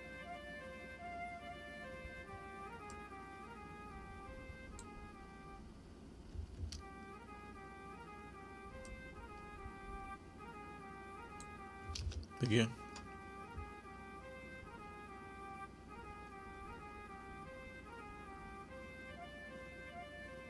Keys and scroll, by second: 6.3 space, 11.8 space.